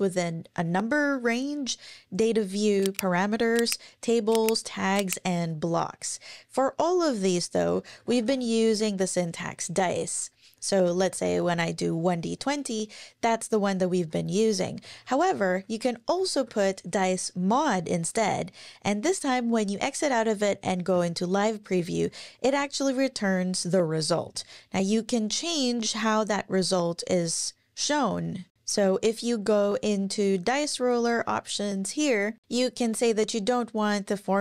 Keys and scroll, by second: 7.5-8.7 typing, 10.6-11.7 typing, 12.4 Up, 13.8 Down, 14.7 alt+Left, 14.8 alt+Left, 15.1 alt+Left, 15.9-17.0 typing, 20.9 Up.